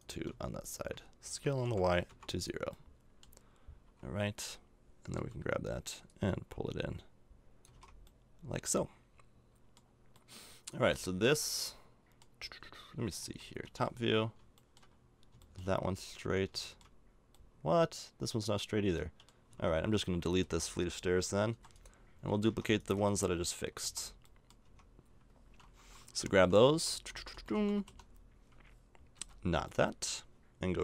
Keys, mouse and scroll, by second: 1.3 s, 2.7 middle click, 3.8 a, 5.1 l, 7.6 a, 7.7 Tab, 10.1 middle click, 10.6 right click, 11.2 middle click, 11.5 middle click, 11.8-13.1 middle drag, 13.1 KP_7, 13.6 KP_5, 14.6 middle click, 19.5 Tab, 20.4 a, 21.5 x, 22.2 Tab, 22.5 Tab, 22.9 Tab, 23.8 a, 24.6 Tab, 26.1-28.0 typing, 29.1 b.